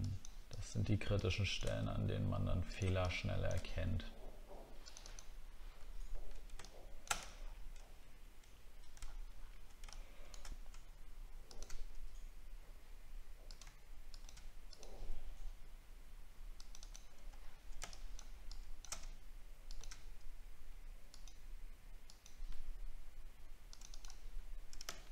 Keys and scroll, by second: 5.8 alt+scroll down 1, 7.4 alt+scroll down 1, 9.0 alt+scroll up 1, 17.4 alt+scroll down 1, 24.3 alt+scroll up 1.